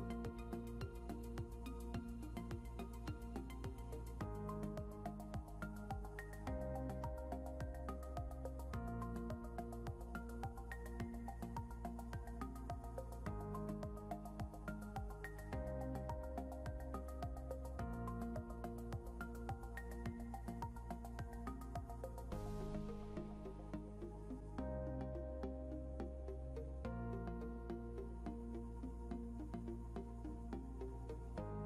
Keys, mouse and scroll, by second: 0.3 click, 2.4-4.3 typing, 6.1 Return, 8.4 scroll down 1, 10.2 scroll up 1, 11.6 scroll down 1, 12.9 click, 15.0 ctrl+q, 16.8 click, 17.4 scroll up 1, 18.9 click, 25.1 shift+click, 29.8 click, 31.0 scroll up 1, 31.5 click.